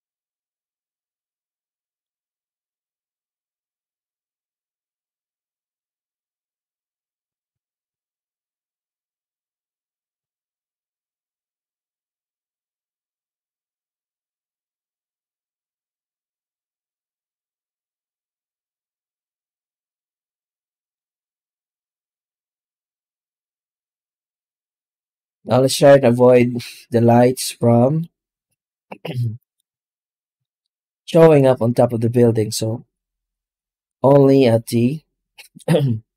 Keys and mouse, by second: 1.6 middle click, 2.8-6.0 drag, 7.4-9.6 drag, 10.4-13.7 drag, 19.5-19.8 middle drag, 20.8 middle drag, 23.8 z, 27.9-29.4 shift+middle drag, 31.9 ctrl+s.